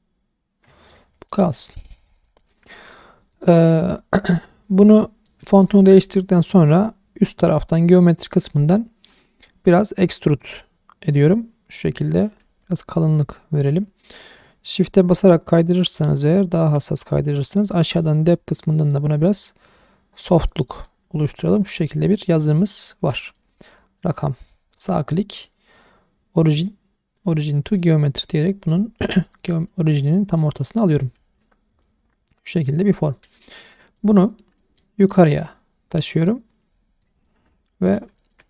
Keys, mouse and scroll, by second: 0.8 click, 1.1 scroll down 1, 1.2-1.5 middle drag, 1.7-2.0 scroll up 1, 2.0 middle drag, 2.3 shift+middle drag, 2.6 scroll up 2, 3.3 click, 5.0 middle drag, 5.5 shift+middle click, 7.5 click, 10.1-16.7 drag, 18.8 click, 20.4 scroll down 1, 20.5-21.4 middle drag, 21.6 click, 22.0-22.4 scroll down 2, 22.4-23.1 scroll up 2, 23.2 shift+middle drag, 23.4 shift+scroll up 1, 23.5-24.0 scroll down 2, 24.0 click, 24.5-24.8 scroll up 1, 24.8-28.9 drag, 24.8 right click, 27.9-28.9 right drag, 28.9 scroll down 1, 29.2 shift+middle click, 30.5 g, 30.8 right click, 31.3 alt+g, 31.8-32.7 middle drag, 33.2 /, 33.7 middle drag, 34.2 scroll up 1, 34.6 middle drag, 35.4 click, 37.3-38.0 middle drag, 38.2 shift+middle drag.